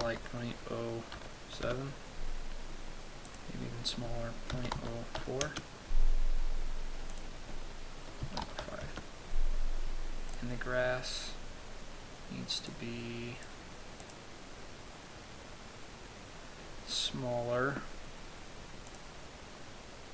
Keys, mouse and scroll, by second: 3.9 click, 7.7 click, 10.9 right click, 13.2 click, 14.5 click, 19.4 click.